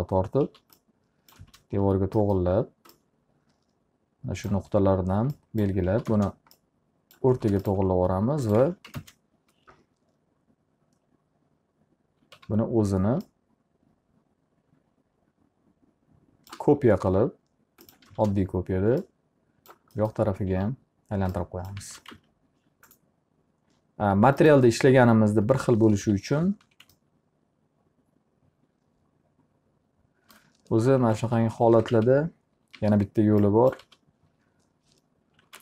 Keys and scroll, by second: 1.0 s, 1.9 space, 5.9 s, 6.6 space, 9.2 alt+a, 9.5 ctrl+space, 12.9 e, 18.2 space, 21.1 s, 22.4 space, 22.7 alt+a, 26.6 p, 27.2 z, 31.2 ctrl+z, 32.2-33.3 typing, 34.4 alt+r.